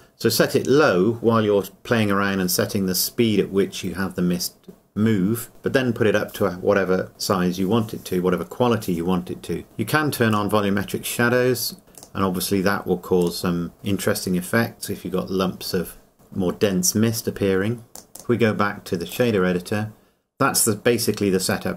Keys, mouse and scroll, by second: 10.3 click, 18.0 click, 18.2 click.